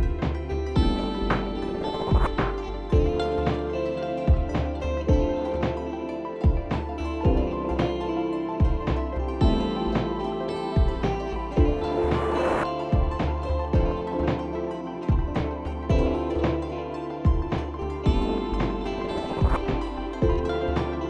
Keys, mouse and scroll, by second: 1.6 ctrl+g, 4.8 alt+scroll down 1, 7.9 click, 8.1-9.7 scroll, 9.7 click, 12.3 click, 13.0 click, 17.4 click.